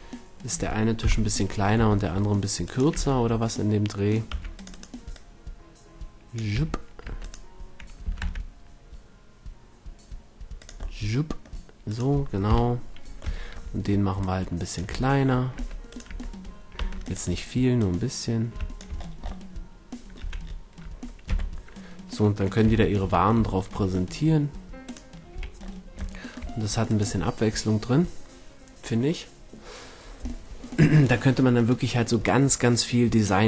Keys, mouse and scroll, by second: 1.0 KP_1, 2.9 Tab, 4.3 c, 5.1-6.1 drag, 6.6 a, 7.0 Tab, 8.0 s, 10.7-11.9 drag, 11.9 middle click, 12.5 KP_1, 14.2-15.2 drag, 14.9 Tab, 15.6 Tab, 15.7 click, 16.0 Tab, 16.8 c, 17.7 middle click, 18.1-19.7 drag, 20.2 a, 21.2 z, 22.6 z, 23.0 Tab, 25.3 a.